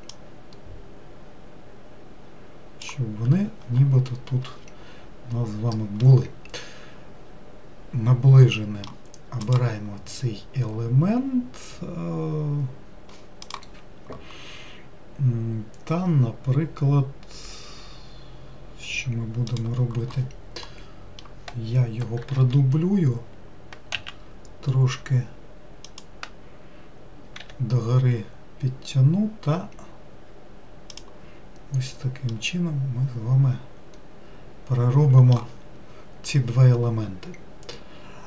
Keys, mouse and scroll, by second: 0.2 click, 6.1-9.1 middle drag, 9.5 click, 20.7-22.3 middle drag, 22.3 shift+d, 27.5 e, 32.4-35.4 middle drag.